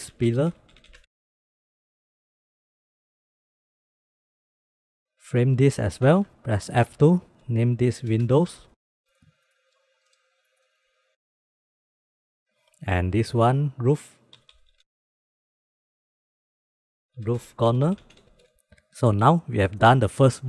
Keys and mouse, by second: 0.4 l, 1.1-1.5 drag, 1.7 middle click, 1.9 middle click, 2.4 middle click, 2.7 drag, 3.3 click, 3.5 click, 3.9 click, 4.4-5.0 drag, 5.6 ctrl+j, 6.4 F2, 9.3 click, 9.6 click, 9.9 click, 10.1 click, 10.5 g, 10.9 click, 11.2 click, 12.3 ctrl+j, 12.4 ctrl+z, 12.4 d, 12.7 F2, 13.6 middle click, 14.9 click, 15.2 click, 15.4 click, 15.7 click, 16.2 ctrl+j, 16.8 F2, 17.4 o.